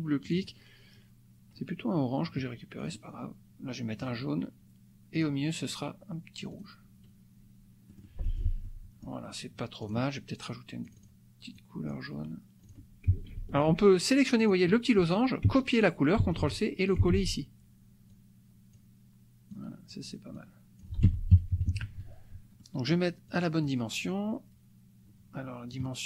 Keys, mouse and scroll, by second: 0.2 click, 2.8 click, 4.0 click, 5.1 click, 6.6 click, 7.8 click, 8.8 click, 9.8 click, 10.9 click, 11.5 click, 12.6 click, 13.3 ctrl+c, 14.3 click, 16.3 ctrl+c, 16.9 ctrl+click, 17.1 ctrl+v, 18.0-19.1 drag, 19.6 click, 20.3 click, 21.0 F1, 21.5 KP_Subtract, 22.6 click, 23.3 drag, 23.6-25.9 drag.